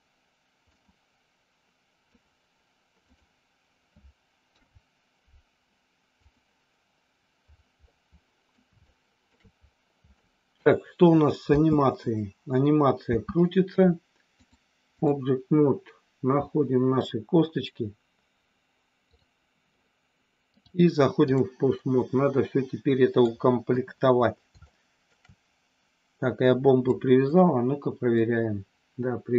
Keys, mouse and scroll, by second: 0.8-2.2 drag, 4.4 ctrl+p, 7.8 middle click, 8.8 shift+middle click, 10.2 middle click, 11.4 space, 13.0 space, 14.6 click, 19.0 click, 20.4 click, 21.7-23.2 middle drag, 23.7 KP_1, 24.6 middle click, 26.9 click, 28.2-29.3 drag.